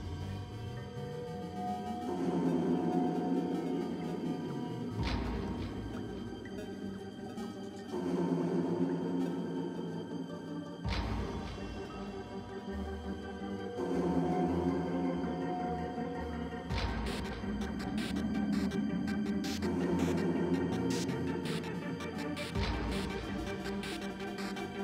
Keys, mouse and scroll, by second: 1.6 ctrl+b, 5.9 F6.